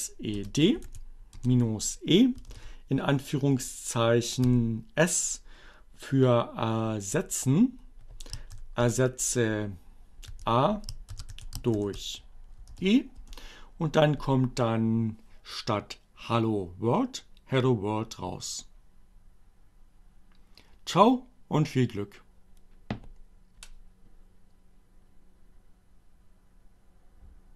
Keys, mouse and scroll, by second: 0.4 space, 0.7 e, 1.0 space, 2.9 s, 8.0 shift+7, 10.4-11.8 typing, 13.0 shift+Return.